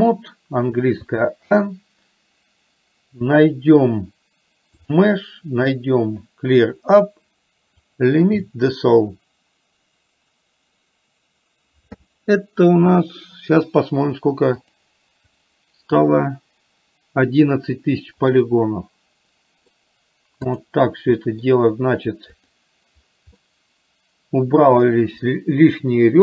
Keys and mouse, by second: 5.0-8.2 drag, 15.0 click, 18.5-19.8 middle drag, 20.5 click, 21.2 middle click, 22.5 click, 23.5-26.2 middle drag.